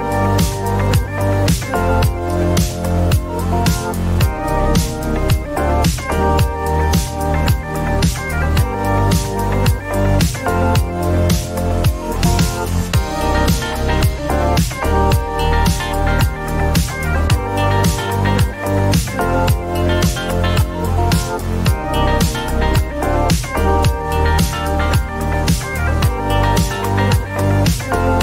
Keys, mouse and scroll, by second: 0.5 Return, 4.6 click, 4.7 click, 8.2 click, 10.0-13.0 typing, 15.5 click, 16.7 click, 17.8 click, 20.1 click, 23.4 click, 23.8-25.2 typing, 25.2 Return.